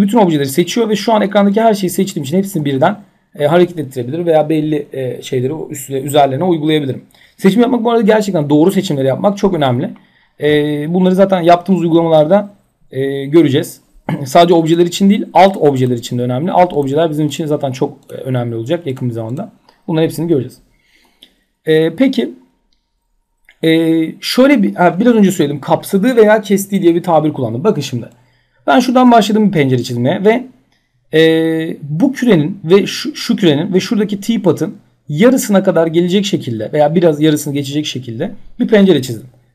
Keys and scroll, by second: 2.1 ctrl+z.